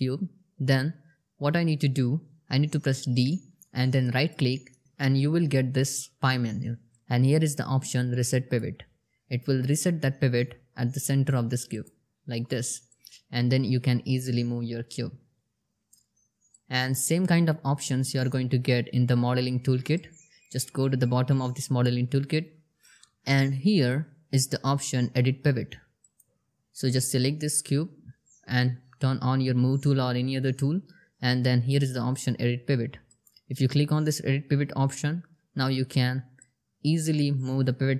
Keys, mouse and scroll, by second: 2.7-8.2 typing, 9.9 typing, 11.1-15.4 drag, 25.4 click, 32.4 click, 35.8-37.9 drag.